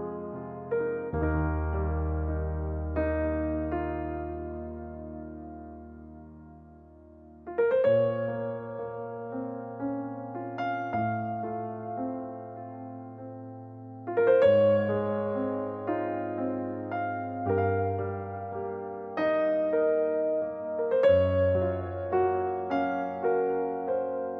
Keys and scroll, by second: 1.4-2.8 typing, 7.0-7.7 typing, 14.7-15.6 typing, 16.9 Return, 17.6-18.3 typing, 22.3 ctrl+z.